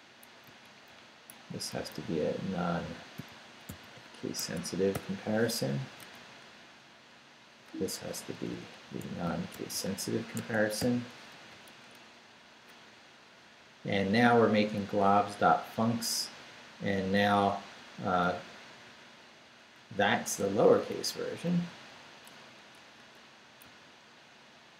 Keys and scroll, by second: 0.2 Up, 1.3 Down, 1.7 Right, 2.8 i, 3.7 c, 4.4 Escape, 4.9 n, 5.6 Left, 5.8 Right, 6.0 Left, 6.2 Right, 8.5 i, 9.5 c, 10.4 Escape, 10.8 n, 11.3 Left, 11.8 Right, 14.0 Right, 15.2 Left, 18.2 Up, 19.4 Down, 19.8 Right, 21.5 l, 22.4 Left, 23.6 Right.